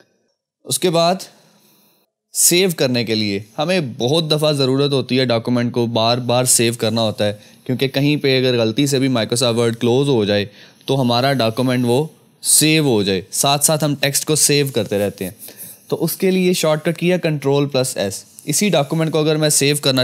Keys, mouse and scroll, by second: 0.2 click, 17.5 click, 17.6 click.